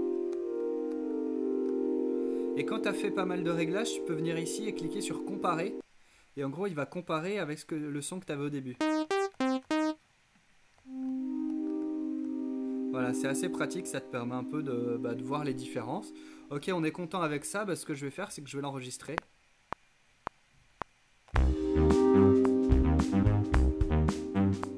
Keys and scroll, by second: 0.0-2.3 typing, 8.6-12.8 typing, 19.2 r, 21.1-21.9 typing.